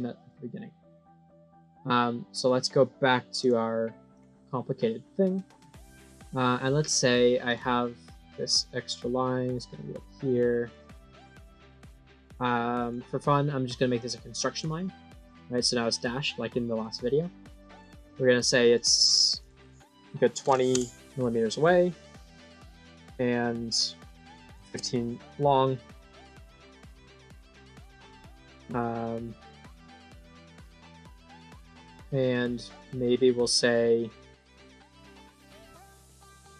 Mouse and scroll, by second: 2.2 click, 3.3 click, 4.0 click, 7.4 click, 9.4 click, 10.5 click, 11.0 click, 11.3 click, 11.6 right click, 12.0 click, 12.7 click, 13.9 click, 16.6 click, 17.6 click, 18.6 click, 19.3 click, 22.3 click, 22.9 click, 25.4 right click, 26.8 click, 29.4-34.7 drag, 36.3 scroll up 2.